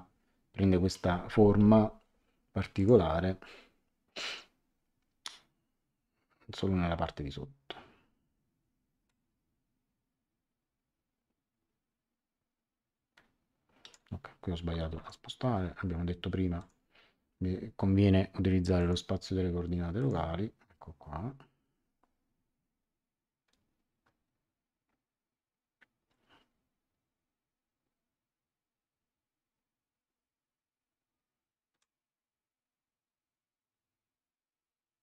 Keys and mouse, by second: 2.7 click, 9.0 click, 14.9 Escape, 16.5 click, 18.7 click, 19.9 click, 31.8 click.